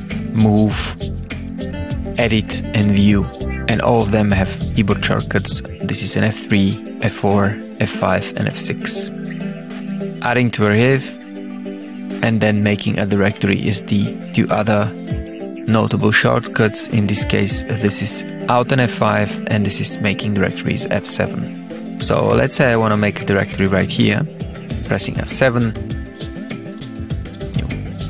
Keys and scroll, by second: 24.9 F7, 26.1-28.0 typing.